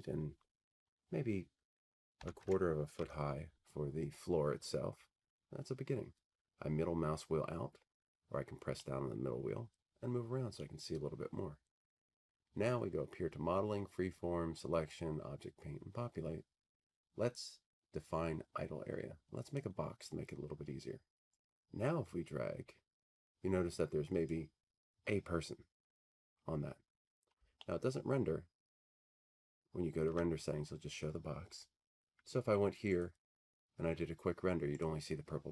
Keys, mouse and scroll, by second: 2.2-2.9 typing, 3.0 Tab, 5.6-6.0 scroll, 6.6-7.4 scroll, 7.9-10.2 middle drag, 10.6-12.8 middle drag, 19.6-21.7 drag, 24.2 click, 27.4 click, 28.8 alt+middle click, 30.0 alt+middle click, 33.1 click, 35.0 click.